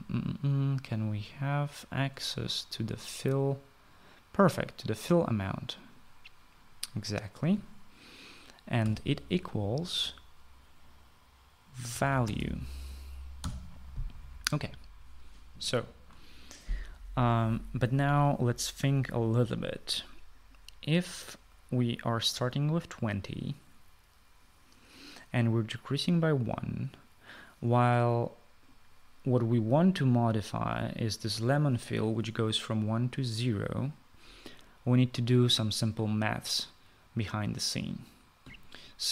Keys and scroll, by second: 9.8 =, 12.6-14.7 typing.